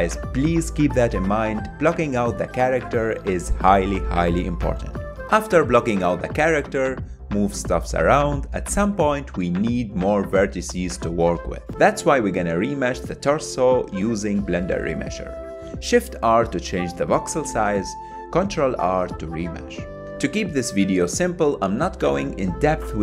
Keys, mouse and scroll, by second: 0.0 middle click, 0.1 click, 0.3 middle click, 0.3 click, 0.6 ctrl+z, 0.7 click, 0.8 middle click, 1.1 click, 1.2 middle click, 1.3 g, 1.6 click, 1.7 f, 1.9 click, 2.5 middle click, 2.5 click, 2.8 middle click, 3.5 shift+f, 3.6 click, 3.8 middle click, 3.9 click, 4.0 middle click, 4.3 shift+click, 4.5 middle click, 4.6 shift+click, 4.9 g, 5.0 click, 5.2 middle click, 5.3 click, 5.6 ctrl+Tab, 5.8 ctrl+middle click, 5.9 shift+r, 6.5 ctrl+r, 6.6 middle click, 6.8 shift+click, 7.0 middle click, 7.1 shift+click, 7.3 middle click, 7.5 shift+click, 7.5 middle click, 7.6 shift+click, 7.7 middle click, 7.8 shift+click, 7.9 middle click, 8.3 shift+click, 8.5 middle click, 8.6 shift+click, 8.7 middle click, 8.8 shift+click, 8.9 middle click, 9.0 shift+click, 9.1 middle click, 9.6 KP_1, 10.2 click, 10.4 f, 10.7 click, 11.0 ctrl+z, 11.2 click, 11.5 f, 11.6 click, 11.8 middle click, 12.0 click, 12.2 middle click, 12.3 click, 12.5 middle click, 12.8 click, 12.9 middle click, 13.0 ctrl+z, 13.2 click, 13.3 ctrl+middle click, 13.5 f, 13.6 f, 13.7 click, 13.9 middle click, 14.0 click, 14.2 ctrl+middle click, 14.2 f, 14.3 click, 14.6 middle click, 14.7 click, 15.0 middle click, 15.1 ctrl+z, 15.2 click, 16.1 click, 16.3 middle click, 16.5 ctrl+click, 16.7 middle click, 17.0 click, 17.2 ctrl+middle click, 17.3 KP_1, 17.5 ctrl+middle click, 17.7 click, 17.8 f, 18.0 click, 18.2 middle click, 18.3 click, 18.6 middle click, 18.7 shift+click, 19.0 ctrl+middle click, 19.2 KP_1, 19.3 click, 20.2 ctrl+middle click, 20.8 KP_1, 20.9 ctrl+middle click, 21.0 click, 21.1 ctrl+z, 21.3 click, 21.4 ctrl+middle click, 21.8 click, 22.0 f, 22.1 middle click, 22.2 ctrl+shift+click, 22.4 ctrl+z, 22.5 click.